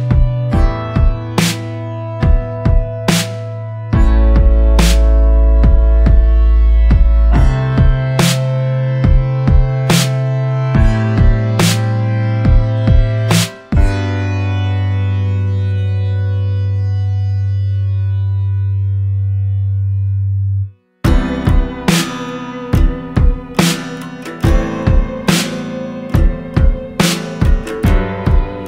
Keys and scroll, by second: 1.1 ctrl+z, 11.3 ctrl+z.